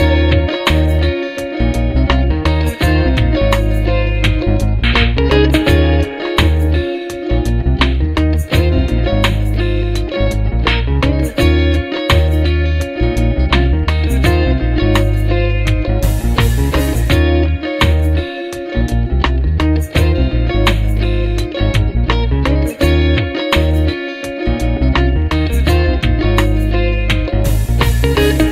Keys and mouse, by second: 7.7 double click, 7.7 space, 19.9 double click, 23.8 right click.